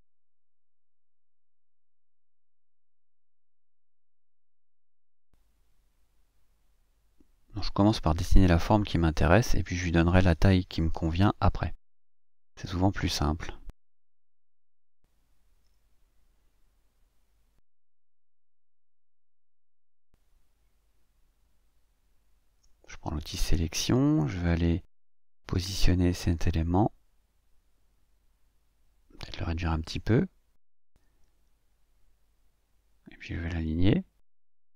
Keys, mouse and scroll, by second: 0.3-3.6 drag, 3.8 ctrl+scroll up 2, 5.5-8.2 drag, 8.9-11.9 drag, 12.2 click, 14.2 ctrl+click, 15.4 click, 16.6-18.8 drag, 19.5-21.5 drag, 21.8 click, 22.4 click, 22.9 click, 24.7 click, 25.9-27.5 scroll up 3, 27.5-30.1 drag, 30.8-32.0 ctrl+shift+drag, 33.3-34.6 drag.